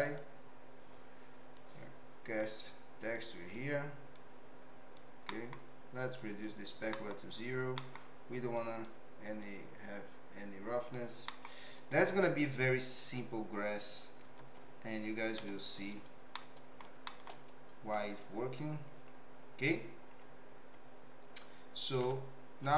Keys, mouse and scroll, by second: 0.0 click, 3.2 click, 4.2 click, 5.4 middle click, 6.2 click, 7.0 middle click, 7.9 middle click, 8.6 click, 9.5-11.0 drag, 11.4 middle click, 11.7 click, 14.3 ctrl+t, 15.3 g, 16.3-16.8 middle drag, 17.1 shift+middle click, 22.0 z.